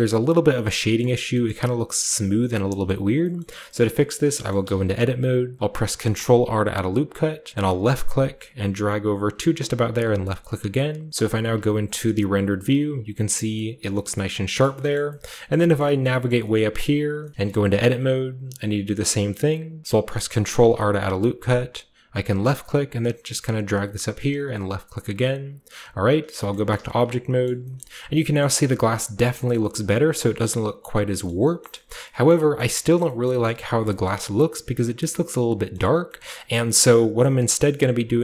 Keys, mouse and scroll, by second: 0.6-1.1 scroll up 1, 1.0 shift+middle click, 1.1-2.6 scroll down 1, 1.4-2.6 middle drag, 2.6 shift+scroll down 1, 2.8-3.2 middle drag, 2.8-5.5 scroll up 1, 3.3 middle click, 3.8 shift+middle click, 4.5-5.6 middle drag, 4.5 Tab, 5.5-6.7 scroll up 1, 5.9 ctrl+r, 6.7-7.2 ctrl+scroll up 1, 7.2 ctrl+scroll up 1, 7.8-9.1 drag, 10.0-11.1 drag, 11.3 z, 12.6 Tab, 13.2 scroll down 1, 13.5-14.4 middle drag, 14.6 shift+middle drag, 14.9 shift+middle click, 15.0-15.7 shift+scroll down 2, 15.2 shift+middle click, 15.5 shift+middle click, 15.7-17.1 shift+scroll up 1, 15.7 shift+middle drag, 16.2 shift+middle click, 16.5-17.2 shift+middle drag, 17.1 shift+scroll up 1, 17.3-18.7 shift+middle drag, 20.5 ctrl+r, 22.3-24.4 drag, 24.5-26.5 drag, 25.6 Tab, 25.8-28.5 scroll down 3, 26.5-26.9 shift+middle drag, 26.7 a, 27.4 shift+middle click, 27.7 shift+middle click, 28.3-29.2 shift+middle drag, 28.5-29.2 shift+scroll up 2, 29.2-31.2 scroll up 1, 29.5-29.8 middle drag, 31.2 middle click, 31.3-32.7 scroll down 7, 32.8 shift+scroll up 2, 32.9 shift+middle drag, 33.2 shift+middle click, 33.4-33.8 shift+middle drag, 33.4-34.8 shift+scroll up 3, 34.0-35.0 shift+middle drag, 34.8 shift+scroll down 2, 35.7-36.0 middle drag, 36.0-36.8 scroll down 1, 36.2 middle click, 36.5 middle click, 36.8 middle click, 37.1 click.